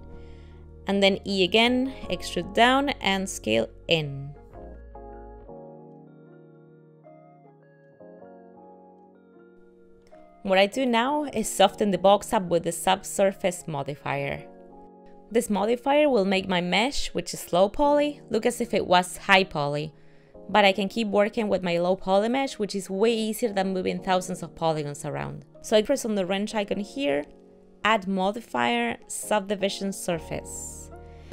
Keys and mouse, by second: 1.1 e, 4.3 s, 7.6 shift+middle click, 7.8 shift+middle click, 8.0 shift+middle click, 8.5 ctrl+middle click, 8.7 ctrl+middle click, 11.4 shift+middle click, 12.2 middle click, 13.1 middle click, 14.9 middle click, 16.4 middle click, 16.8 shift+middle click, 19.4 middle click, 27.5 click, 28.9 click.